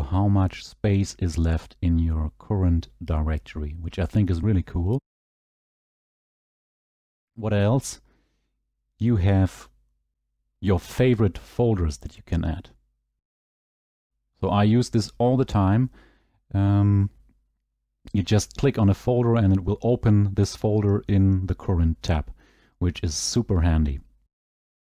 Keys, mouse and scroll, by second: 9.7 click, 21.2 click, 22.9-23.5 scroll, 23.5-23.8 scroll down 7, 23.8-24.2 scroll, 24.2-24.6 scroll down 10, 24.6-24.8 scroll.